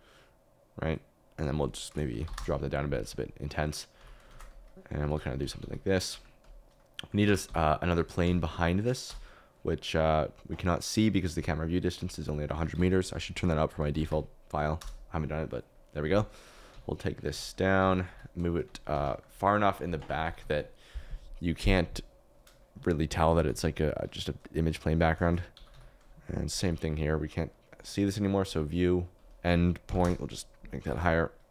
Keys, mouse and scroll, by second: 0.0 click, 3.9-5.6 typing, 6.9 middle click, 7.2-9.0 typing, 12.0 click, 14.0 0, 16.6-18.6 typing, 18.9 Escape, 20.2 g, 20.3 z, 20.4 z, 23.2 g, 23.4 z, 23.5 z, 25.0-26.6 typing, 30.8 n.